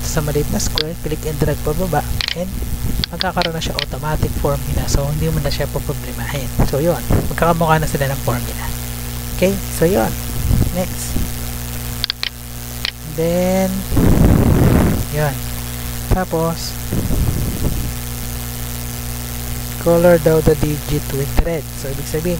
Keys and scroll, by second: 4.1 Down, 4.9 Up, 6.6 Down, 7.0 Up, 7.3 Down, 8.2 Up.